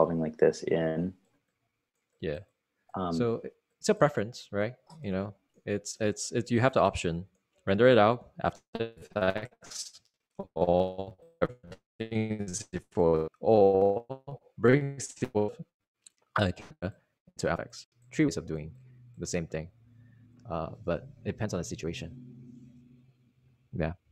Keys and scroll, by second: 23.6 super+r.